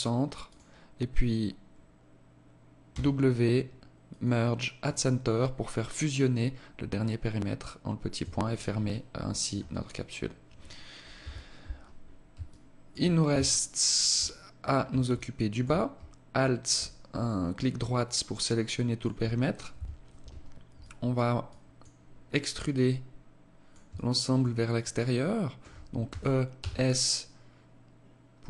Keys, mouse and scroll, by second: 2.3 w, 7.6 Tab, 8.3 alt+click, 9.1-9.5 scroll down 4, 9.5 scroll up 1, 10.6 KP_1, 11.9 alt+shift+click, 12.7 Tab, 14.0 alt+right click, 14.5 alt+click, 15.7 alt+right click, 16.7 alt+click, 19.1 KP_1, 20.2 alt+click, 20.9 alt+click, 22.1 alt+click, 23.3 alt+shift+click, 24.3 alt+shift+click, 25.5 e.